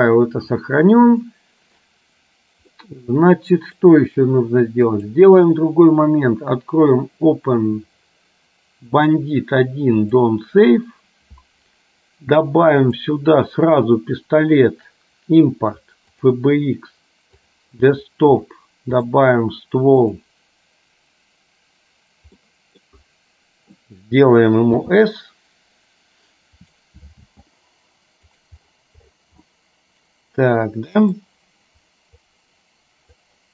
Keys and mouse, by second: 2.8-3.8 middle drag, 5.2-10.7 drag, 13.1-16.7 drag, 22.6 middle click, 24.8 s, 27.3 g, 29.6-31.3 middle drag, 32.6 click.